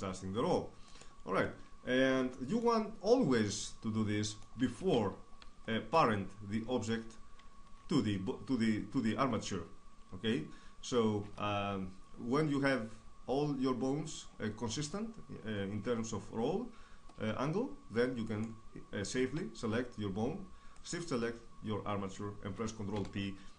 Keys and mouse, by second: 2.3 shift+space, 8.8 Tab, 15.8-20.5 right drag, 20.5 ctrl+p.